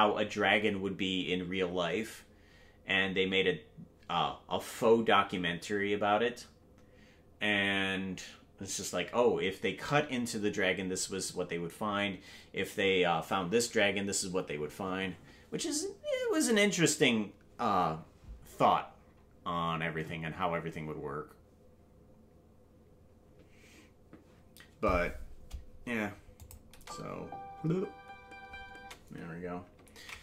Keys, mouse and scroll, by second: 26.4 click, 26.7 space.